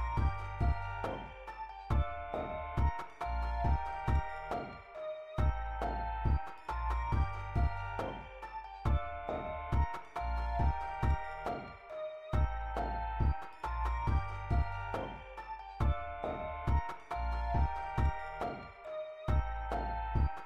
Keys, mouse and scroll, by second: 3.1 click, 7.6 click, 10.7 click.